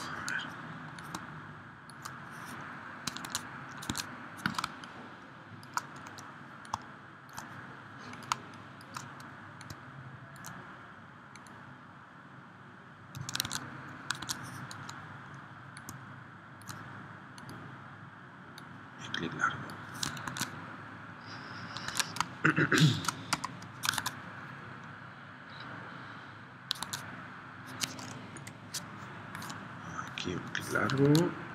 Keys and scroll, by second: 3.3 super+Tab, 3.9 super+Tab, 4.7 space, 8.4 space, 13.5 super+Tab, 14.2 super+Tab, 20.2 super+Tab, 21.9 super+Tab, 22.2 space, 23.3 v, 24.0 super+Tab, 26.8 super+Tab, 28.4 p, 31.0 super+Tab.